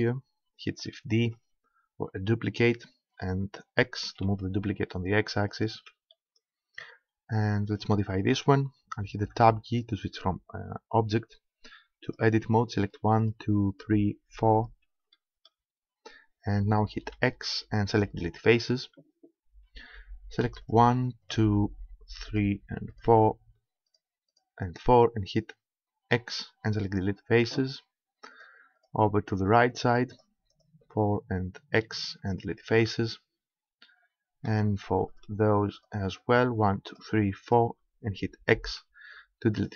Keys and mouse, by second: 1.3 shift+d, 5.7 click, 6.1-7.7 middle drag, 9.3 Tab, 12.1-15.5 right drag, 17.2 x, 20.7-22.9 drag, 26.1 x, 31.7 x, 35.1-39.3 right drag, 38.5 x.